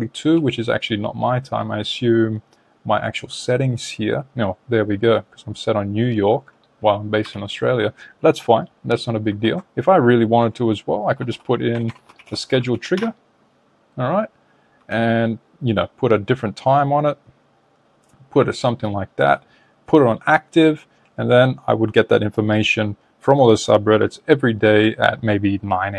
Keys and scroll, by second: 9.3 super+Tab, 11.6 BackSpace.